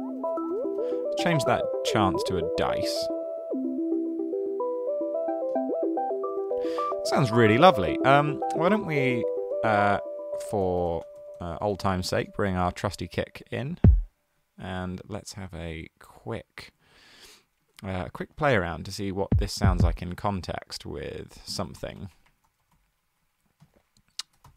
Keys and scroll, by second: 0.2-1.2 typing, 8.5 super+f, 8.6-12.2 typing, 16.1 super+x, 19.6 Down, 19.7 Down, 20.0 super+d, 21.4 super+z, 22.0 Right, 22.2 Right, 22.5 super+a, 23.0 Right, 23.2 Right, 24.5 super+l.